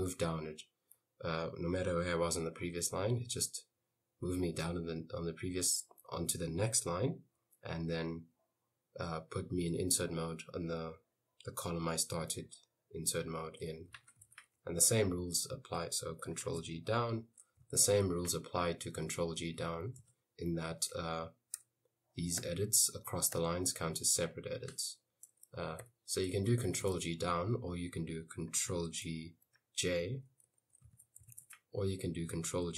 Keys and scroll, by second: 13.8-15.0 typing, 16.5 ctrl+g, 16.8 Down, 17.4-19.1 typing, 20.2 Escape, 21.7 u, 22.4 u, 23.4 u, 25.9-27.4 typing, 28.8 ctrl+g, 29.5-32.2 typing, 32.6 ctrl+g.